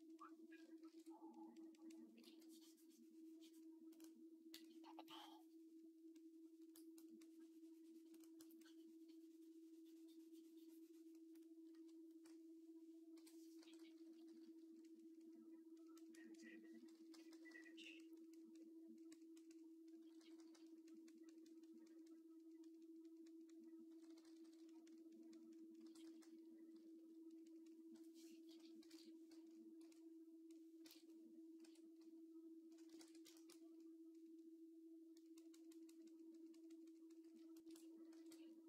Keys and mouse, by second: 0.7 alt+q, 2.1 v, 11.5 KP_3, 13.0-14.2 typing, 16.6-17.3 typing, 19.8 [, 20.0 [, 20.2 [, 20.3 [, 23.7-24.4 typing, 25.6-26.8 typing, 25.8-29.3 drag, 28.7 ctrl+Tab, 29.3 middle click, 29.6 x, 30.3 click, 30.7 ctrl+Tab, 31.4 r, 32.8 ctrl+r, 33.1 shift+click, 38.0 alt+q.